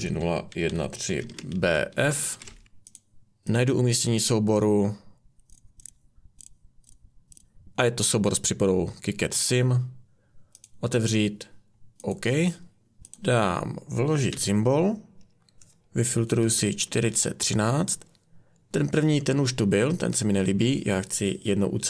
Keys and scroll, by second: 0.0-2.6 typing, 14.3 typing, 16.1-17.4 typing.